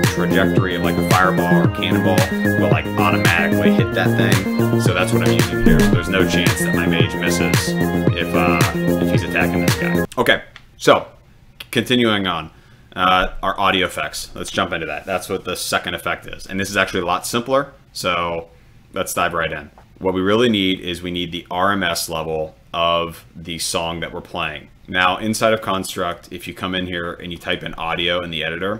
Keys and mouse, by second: 6.6 click, 8.2 click, 9.3 click, 13.7 click, 26.1 click, 27.5 click.